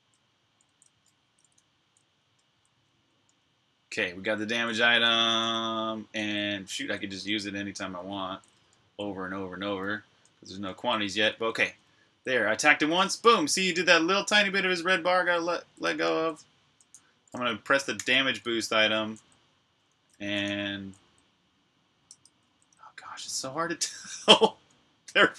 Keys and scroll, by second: 0.0-3.0 typing, 6.8-7.6 typing, 10.3-15.3 typing, 17.3 typing, 21.7-25.3 typing.